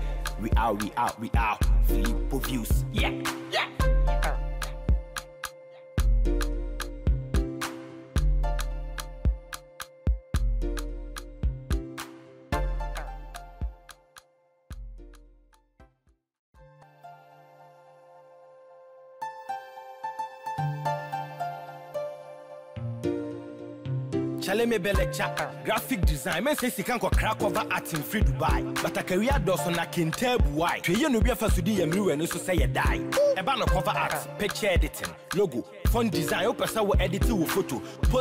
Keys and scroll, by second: 11.8 ctrl+j, 25.9 ctrl+t.